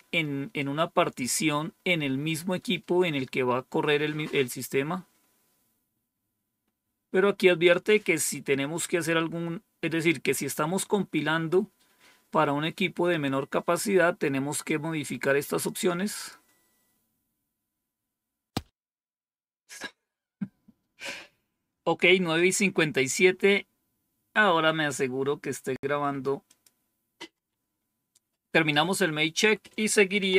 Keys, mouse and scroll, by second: 6.5 scroll down 1, 14.5 click, 16.0 click, 16.5-17.0 scroll down 2, 26.3 click, 27.2 Home, 29.2 Down, 29.9-30.3 typing.